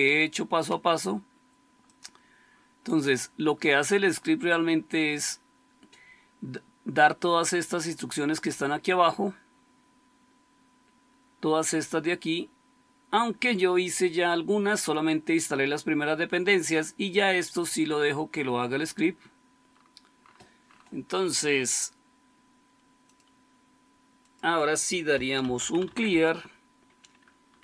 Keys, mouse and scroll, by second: 10.8-15.7 scroll down 1, 15.7-17.3 scroll down 1, 17.3-19.6 scroll down 1, 19.6-22.9 scroll down 1, 22.9-25.1 scroll down 1, 24.9-27.6 typing.